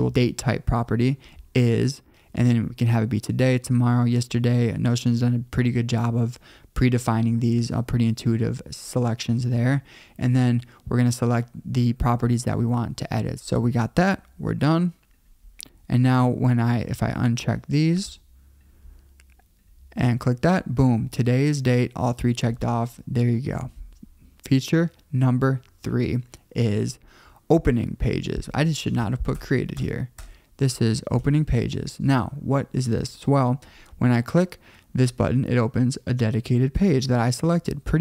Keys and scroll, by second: 29.1 Left, 29.4 alt+BackSpace, 30.0 alt+BackSpace.